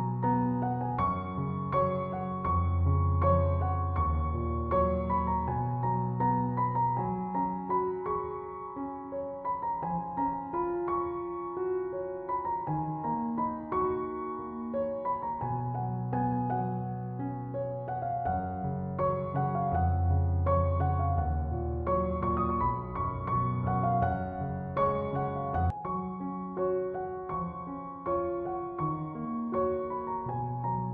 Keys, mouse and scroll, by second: 0.5-10.5 drag, 10.5-16.7 drag, 17.8 click, 22.5 click, 23.0 alt+scroll down 1, 23.9-28.5 drag.